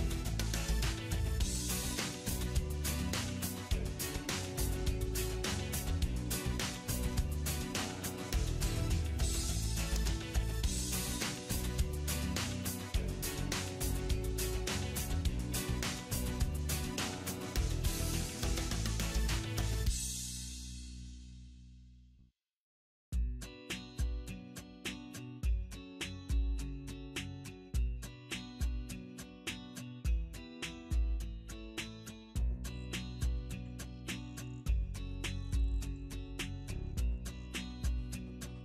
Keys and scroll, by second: 17.0 alt+w.